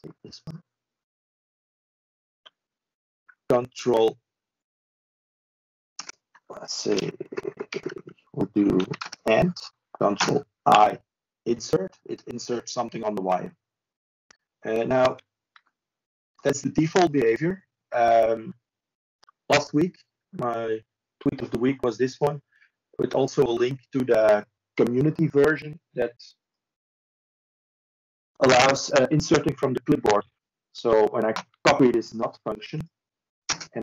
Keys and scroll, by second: 22.2 ctrl+space.